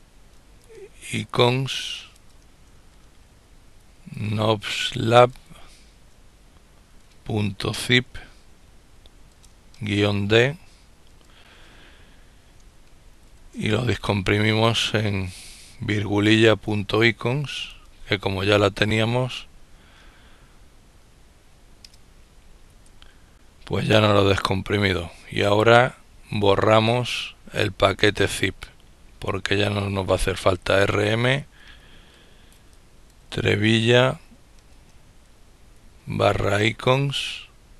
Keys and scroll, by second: 0.0-0.7 typing, 1.8-5.2 typing, 6.9-7.7 typing, 9.2 typing, 12.8 typing, 14.5 typing, 16.1-18.2 typing, 22.0 Return, 26.0-26.7 typing, 30.9-31.7 typing, 33.1 typing, 34.2-36.8 typing.